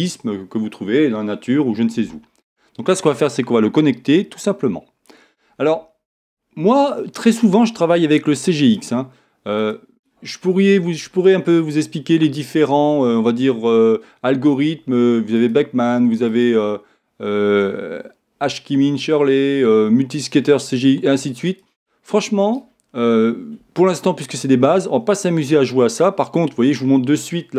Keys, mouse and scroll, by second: 3.3-5.0 drag, 5.1-8.2 drag, 8.9-11.3 drag, 16.3-18.1 drag.